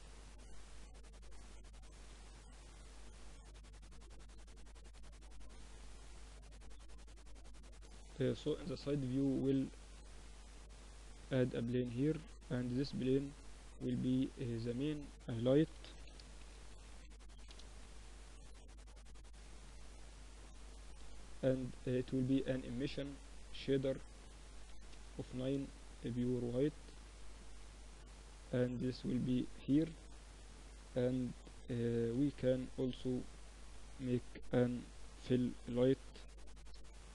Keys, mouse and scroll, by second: 0.5-4.5 middle drag, 2.7 KP_1, 4.5-6.5 drag, 5.7 z, 6.5 middle click, 6.7 KP_3, 9.7-11.2 middle drag, 9.9 shift+a, 11.2 click, 11.6 r, 13.1-15.9 drag, 17.6-19.5 drag, 22.9-26.1 drag, 26.5 s, 27.9-29.7 drag, 29.1 KP_7, 30.3 KP_1, 32.0-33.8 drag, 32.3 shift+a, 33.8 r, 34.7 s, 37.0-37.1 middle drag.